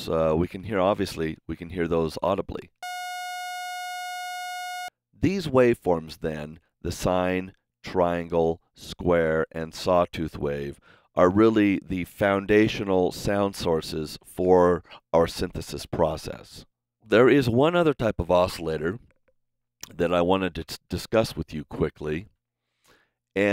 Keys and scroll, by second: 0.6 r, 2.7 space, 3.3 super+s, 19.9 super+Tab, 21.1 a.